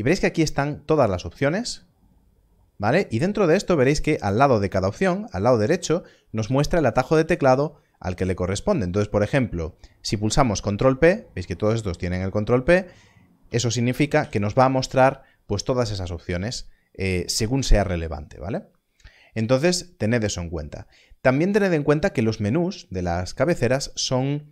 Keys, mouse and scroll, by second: 13.4 click, 14.2 ctrl+p.